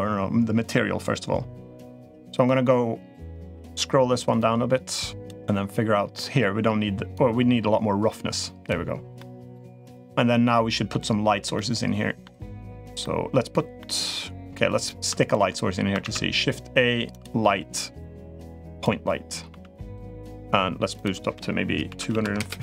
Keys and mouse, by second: 4.1 click, 6.9-8.5 drag, 9.0-9.3 middle drag, 9.8-10.7 middle drag, 11.3-12.0 middle drag, 12.8-13.3 middle drag, 13.6-14.4 middle drag, 15.8 shift+a, 19.2 g, 19.9 middle click, 20.4 g, 20.8-22.6 drag.